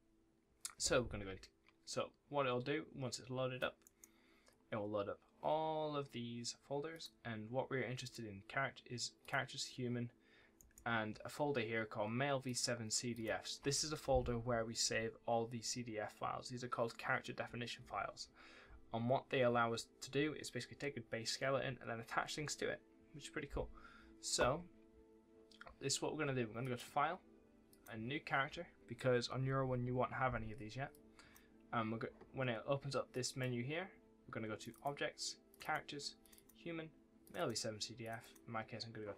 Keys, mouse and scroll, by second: 3.0 click, 3.7 right click, 6.8 click, 10.4 right click, 10.6 w, 12.3 click, 26.5 click.